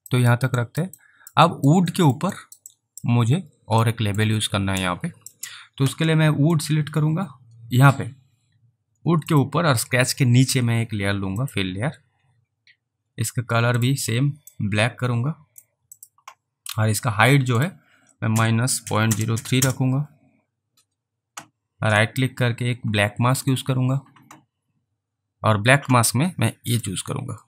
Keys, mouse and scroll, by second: 0.3 alt+middle click, 0.7 alt+right click, 1.1 alt+middle click, 1.6 alt+right click, 2.0 alt+middle click, 2.4 alt+right click, 2.8 alt+click, 3.9 alt+middle click, 4.5 alt+click, 6.6 click, 9.3 click, 11.5 click, 13.8 click, 14.6 click, 16.0 click, 17.5 click, 18.3-19.4 typing, 19.6 Return, 22.1 right click, 23.5 click, 26.8 click.